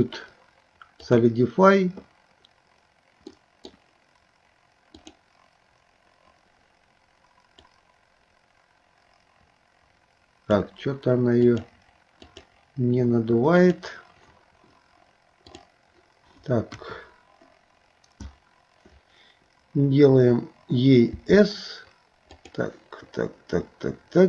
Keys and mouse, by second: 3.3 middle click, 5.1-10.6 drag, 11.6 click, 13.6 click, 15.5 click, 16.7 KP_1, 21.2 s.